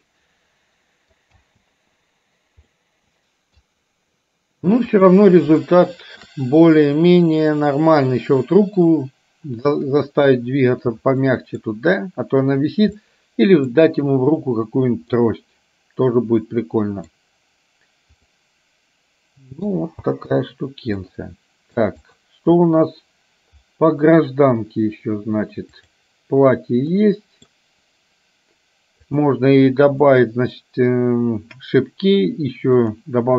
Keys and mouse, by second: 1.5 space, 2.8-3.9 middle drag, 5.0 click, 5.8 shift+middle click, 11.4 middle click, 13.2 middle click, 15.4-17.3 middle drag, 18.4-20.0 middle drag, 20.2 space, 21.2 middle click, 25.9 click, 27.0 middle click, 33.0 click.